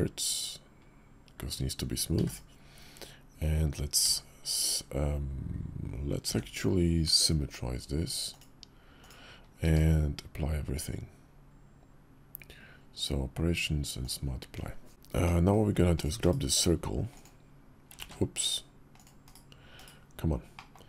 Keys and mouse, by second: 3.8 alt+x, 8.8 click, 9.4 q, 15.0 middle drag, 15.8-17.0 drag, 17.8 ctrl+z, 18.2 /, 19.0 /, 20.3 click.